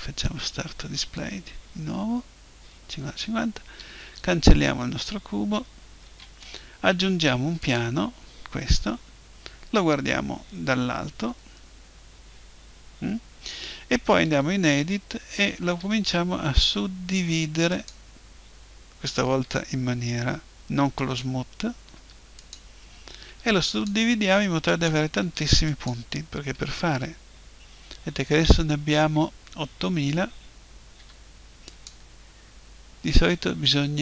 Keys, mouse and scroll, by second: 4.0 Delete, 6.0 shift+a, 9.4 KP_7, 11.4 KP_5, 14.2 Tab, 15.8 w, 19.4 w, 22.0 w, 23.3 w, 24.2 w, 25.2 w, 26.5 w, 31.0 w.